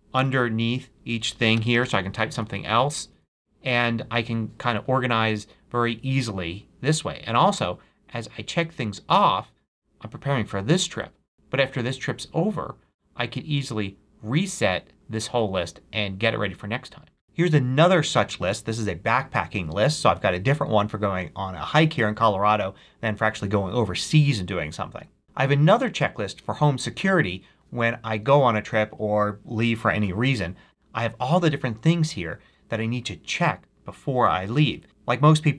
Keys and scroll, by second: 0.6 Tab, 1.1-2.3 typing.